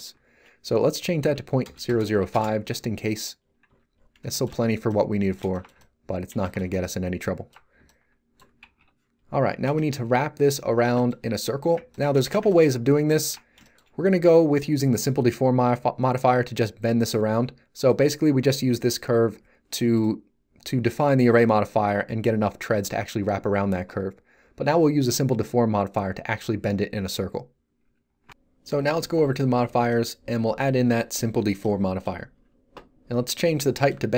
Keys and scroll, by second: 1.2 Delete, 1.6 0, 2.1 5, 2.3 Return, 3.6 z, 8.8 3.